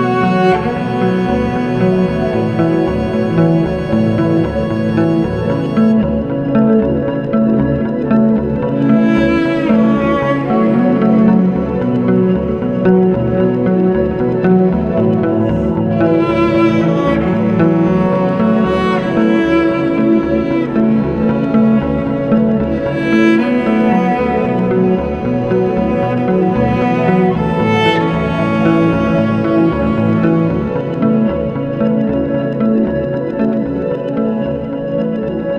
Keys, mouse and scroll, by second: 1.1 click, 3.0 click, 4.1 click, 5.9 click, 6.1 click, 6.8 8, 7.3 Return, 9.5 middle click, 9.5 F4, 9.6-10.3 scroll, 11.5 alt+middle click, 12.3 alt+middle click, 13.0 scroll, 13.2 ctrl+alt+middle click, 15.6 ctrl+alt+middle click, 18.4 click, 18.5 ctrl+alt+scroll, 19.7 click, 21.4 ctrl+alt+middle click, 23.0 click, 25.2 click, 26.5 click, 28.4 scroll, 29.6 click, 30.1 click, 31.0 middle click, 32.6 ctrl+alt+middle click, 35.0 scroll.